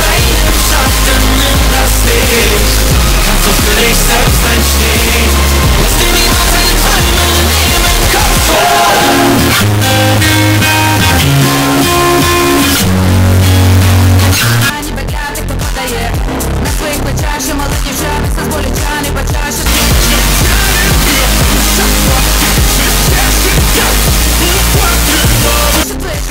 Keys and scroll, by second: 14.8 Page_Down, 25.8 Page_Down.